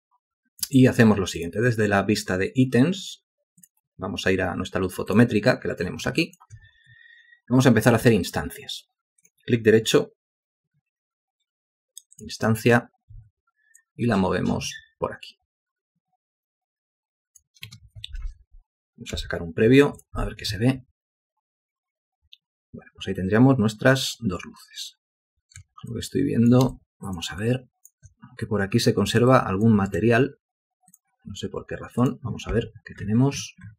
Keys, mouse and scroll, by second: 6.4 alt+shift+click, 13.3 w, 17.9 space, 19.3 F8, 26.1 ctrl+alt+click, 26.9 alt+shift+click, 27.6 alt+shift+click, 29.5 ctrl+alt+click.